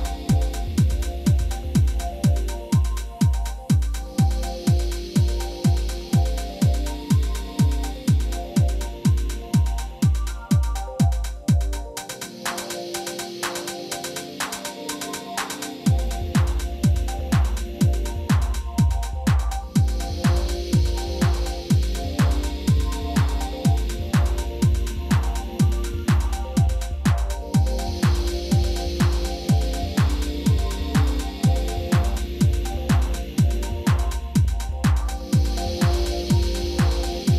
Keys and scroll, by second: 0.6 g, 0.9 x, 5.3 g, 5.5 z, 8.5 g, 8.6 y, 10.1 2, 10.4 shift+z, 12.4 ctrl+z, 15.7 alt+a, 16.2 1, 17.7 ctrl+2, 18.4 b, 19.2 ctrl+z, 19.6 b, 20.4 shift+z, 21.5 shift+e, 25.3 ctrl+r, 25.9 Return, 26.3 s, 26.4 x, 28.4 Tab, 31.7 Tab, 33.9 ctrl+r, 36.4 ctrl+r.